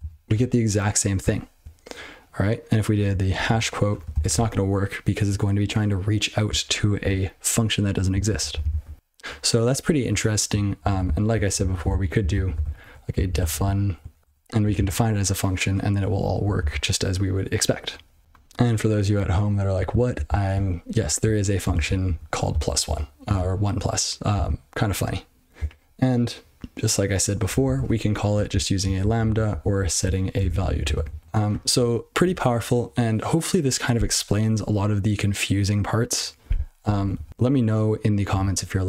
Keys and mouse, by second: 0.0 ctrl+c, 1.2-1.6 ctrl+f, 3.3 #, 3.4 ', 4.3 ctrl+c, 7.0 ctrl+b, 8.1 ctrl+n, 8.4 ctrl+n, 8.6 ctrl+n, 8.8 ctrl+p, 8.9 ctrl+w, 10.8 ctrl+p, 10.9 ctrl+p, 11.0 ctrl+f, 11.4 ctrl+f, 11.6 ctrl+p, 11.8 ctrl+p, 11.9 ctrl+f, 12.2 ctrl+n, 12.3 ctrl+f, 12.5 ctrl+f, 12.7 ctrl+BackSpace, 12.9-14.0 typing, 14.2 ctrl+f, 14.3 ctrl+e, 15.0 ctrl+c, 16.6 ctrl+n, 19.3 ctrl+f, 19.5 ctrl+f, 20.1 ctrl+f, 20.2 ctrl+f, 20.4 ctrl+f, 21.0 ctrl+f, 21.2 ctrl+f, 21.7 ctrl+alt+space, 22.0 ctrl+g, 22.5 ctrl+n, 22.8 ctrl+n, 23.2 ctrl+n, 24.3 ctrl+n, 25.5 ctrl+n, 27.7 ctrl+c, 28.5 ctrl+n, 29.0 ctrl+n, 29.2 ctrl+n, 29.5 ctrl+p, 29.8 ctrl+n, 30.0 ctrl+n, 30.5 ctrl+space, 30.7 ctrl+n, 30.8 ctrl+n, 30.9 ctrl+w, 31.0 ctrl+p, 31.2 ctrl+n, 36.9 ctrl+p, 37.1 ctrl+p, 37.3-38.8 ctrl+p.